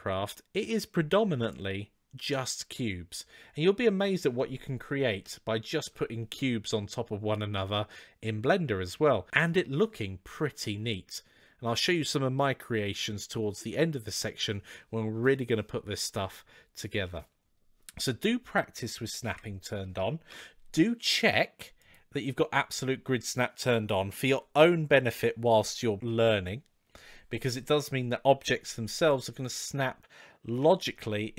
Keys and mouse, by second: 19.0 KP_7, 20.1 KP_3, 21.6-27.3 drag, 28.4 g, 30.6 shift+a.